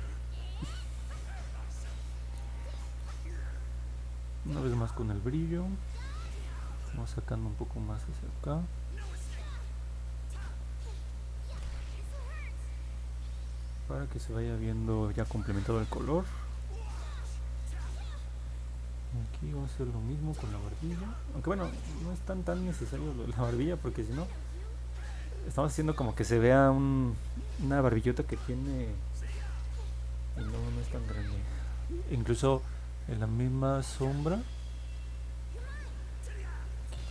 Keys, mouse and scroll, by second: 1.9 click, 4.9 click, 5.3 click, 5.6 click, 6.1 click, 6.5 click, 7.0 click, 7.4 click, 7.8 click, 8.2 click, 8.7 click, 9.1 click, 9.5 click, 9.8 click, 10.2 click, 10.5 click, 10.8 click, 11.1 click, 11.6 click, 11.9 click, 12.2 click, 12.6 click, 12.9 click, 13.6 click, 13.9 click, 14.2 click, 14.5 click, 14.8 click, 15.4 click, 15.7 click, 16.0 click, 16.4 click, 16.7 click, 17.0 click, 18.4 click, 18.8 click, 19.2 click, 19.6 click, 20.1 click, 20.8 click, 21.5 click, 21.8 click, 22.2 click, 22.6 click, 22.9 click, 23.2 click, 23.5 click, 24.3 click, 25.2 click, 25.5 click, 25.9 click, 26.3 click, 26.7 click, 27.4 click, 30.0 middle click, 30.9 middle click, 35.2 click.